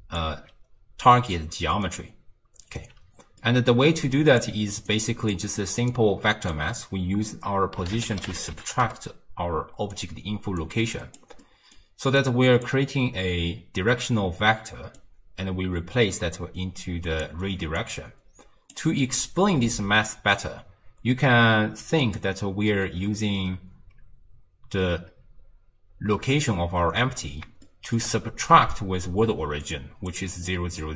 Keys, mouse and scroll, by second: 0.0-0.2 typing, 1.5 d, 1.9 right click, 2.8 d, 2.9 d, 3.4 middle click, 4.1 click, 4.9 click, 5.9 drag, 10.6 drag, 11.5 middle click, 12.2 click, 15.0 drag, 17.8 click, 22.1 click, 27.7-29.4 shift+middle drag, 29.4-30.9 typing, 29.7-30.2 drag, 30.3 click, 30.8-30.9 drag.